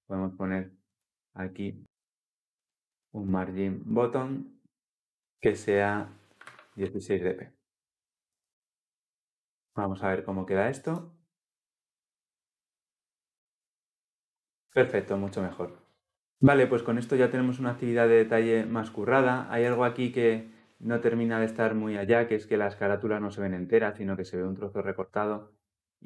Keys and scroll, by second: 8.0 ctrl+s, 10.8 ctrl+F10.